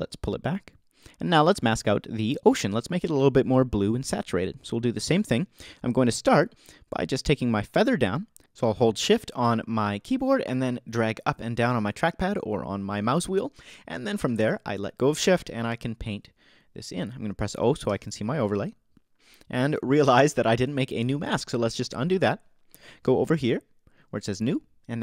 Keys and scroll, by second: 17.9 o.